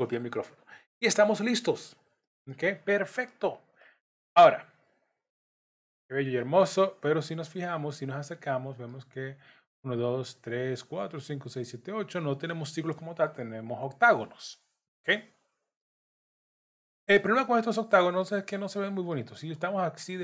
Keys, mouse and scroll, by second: 3.8 middle click, 6.4 middle click, 7.6-8.2 scroll up 2, 8.3 middle click, 15.8 middle click, 17.2 scroll down 1, 18.2 middle click, 19.4 scroll down 2.